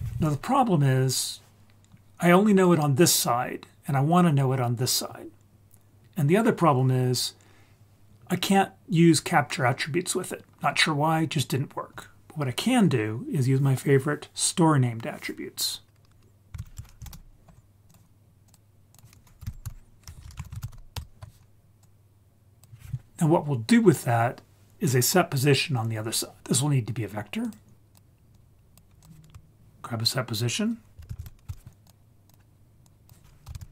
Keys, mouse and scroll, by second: 0.3 scroll down 1, 0.4-1.0 scroll down 1, 16.6 shift+a, 18.9-21.0 drag, 20.2 BackSpace, 21.5 ctrl+z, 21.8-22.6 drag, 26.4 click, 27.5-28.0 drag, 28.3-28.7 drag, 29.0 click, 31.0 shift+a, 31.2 s, 32.8-33.7 drag.